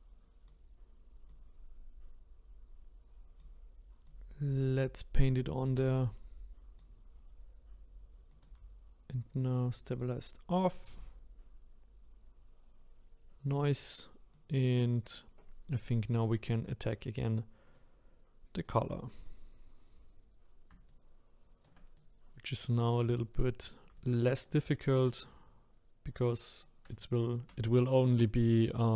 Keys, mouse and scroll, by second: 1.3-17.3 drag, 17.6-20.9 drag, 20.9-28.9 shift+right drag.